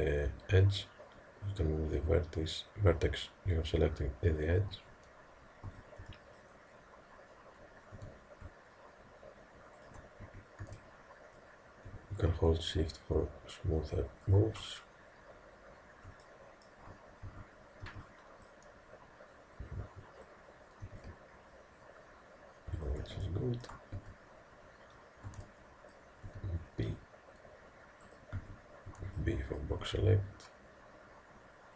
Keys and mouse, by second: 5.7 a, 6.0 b, 8.0 g, 10.3 a, 10.6 b, 11.9 g, 16.3-20.9 middle drag, 17.3 a, 17.9 b, 20.9 g, 23.3-25.3 middle drag, 24.0 a, 25.3 b, 26.3 g, 28.4 a, 28.9 b, 29.8 g.